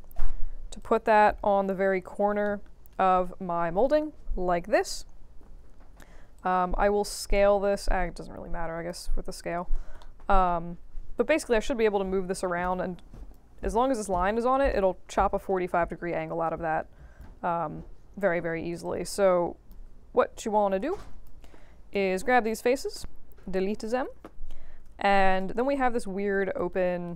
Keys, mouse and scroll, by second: 0.2 middle click, 0.5 v, 0.7 click, 2.0 4, 2.4 alt+middle click, 2.7 alt+middle click, 5.7 r, 6.3-8.8 drag, 9.9 alt+middle click, 10.6 w, 11.1-13.3 drag, 16.4-17.2 right drag, 18.8-19.7 drag, 20.7 q, 21.0 shift+drag, 22.4-22.9 drag, 24.4 q, 24.7 space, 25.4 space, 26.2 f, 26.5-27.1 alt+drag.